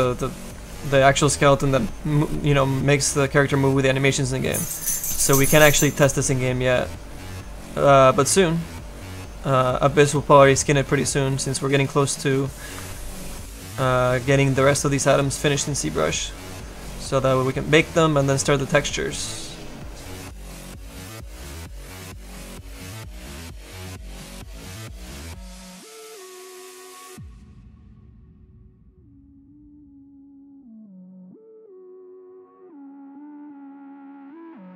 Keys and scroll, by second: 0.4 s, 18.6 s, 22.3 s, 28.5 s.